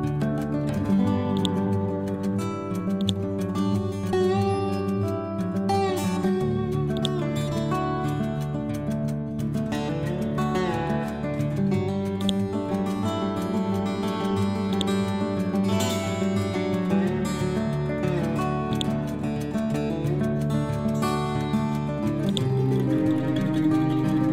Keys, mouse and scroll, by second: 1.4-7.0 drag, 11.0-11.3 scroll up 1, 12.3 click, 12.8 scroll down 1, 13.2-13.6 scroll up 1, 14.8-17.1 ctrl+drag, 17.1-18.8 scroll down 1, 18.8-20.1 drag, 20.1-21.1 scroll down 1, 21.1 scroll up 1, 22.3-23.8 ctrl+drag, 23.8 scroll down 1.